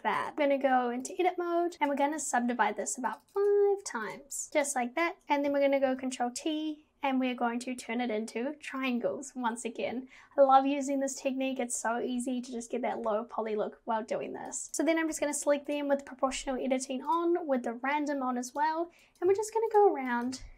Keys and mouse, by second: 0.3 Tab, 1.7 ctrl+z, 3.1 click, 4.1 click, 4.5 Tab, 5.2 Tab, 5.9 ctrl+t, 14.5 click, 15.1 g, 17.3-18.6 drag, 19.3 g, 20.2 click, 20.3 g.